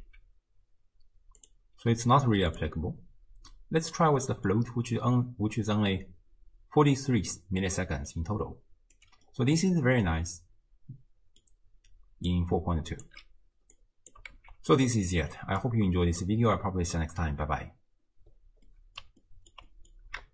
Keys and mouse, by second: 0.8 x, 1.4-2.7 drag, 3.5-4.5 middle drag, 6.0-8.1 d, 8.1 click, 9.0 d, 9.3 d, 9.9 middle click, 10.0-11.4 drag, 10.0-11.4 right drag, 12.3-13.1 drag, 13.8-14.2 drag, 14.4 ctrl+x, 15.6 click, 17.0 middle drag, 18.7-19.0 middle drag, 19.3-19.6 ctrl+middle drag, 19.7 middle click.